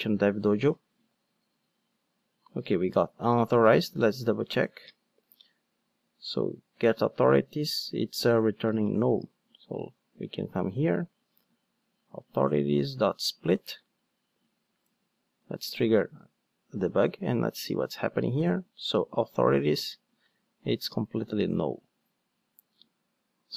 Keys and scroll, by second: 15.5 super+F8, 17.7 super+F8.